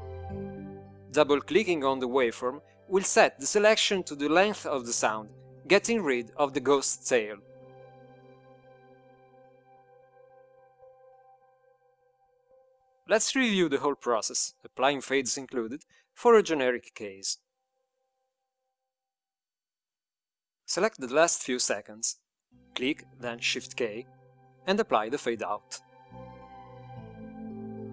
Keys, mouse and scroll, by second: 8.5-9.7 drag, 23.0 click, 25.3 shift+k.